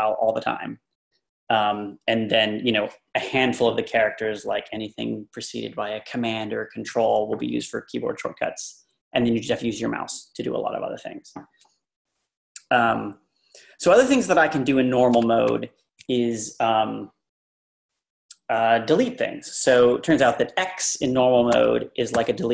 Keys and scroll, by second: 15.2 Up, 19.8 Up, 21.5 x.